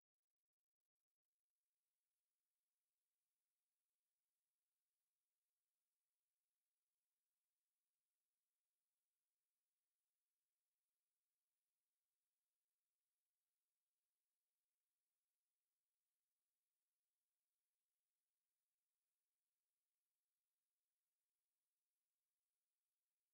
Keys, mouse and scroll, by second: 11.5 middle click.